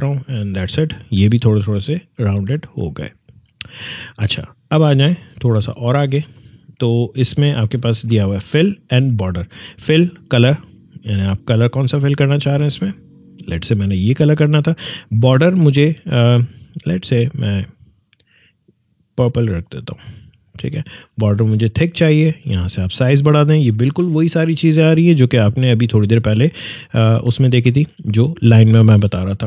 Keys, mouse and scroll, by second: 7.3-19.6 drag, 23.8 4, 24.6 click.